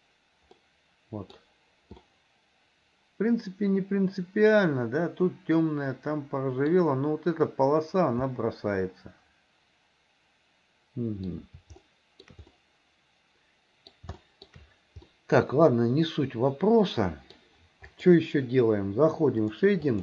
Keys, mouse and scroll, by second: 0.0 click, 0.6 middle click, 2.2-6.7 middle drag, 8.4-11.3 middle drag, 11.9 shift+middle click, 12.6-14.0 middle drag, 14.2 shift+middle click, 15.1-17.4 middle drag, 18.0 click.